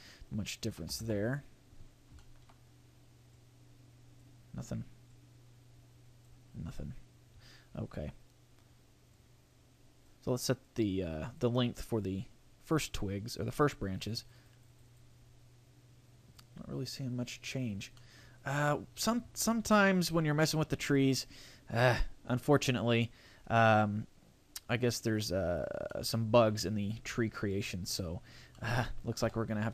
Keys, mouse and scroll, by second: 1.9 scroll down 2, 2.2 shift+middle click, 3.3 click, 5.1 click, 6.5-6.9 scroll down 4, 7.3-8.2 scroll up 3, 8.2 scroll up 2, 9.1 click, 10.6 click, 12.5 scroll up 3, 13.9 click, 14.2 click, 14.4 click, 14.6 click, 14.7 click, 14.9 click, 16.3 click, 17.7 scroll down 3, 17.9 middle click, 18.3 right click, 19.7 a, 20.9 right click, 22.7 middle click, 23.3 scroll down 3, 24.5 scroll up 1, 25.9 middle click, 28.5 middle click, 29.2 Delete.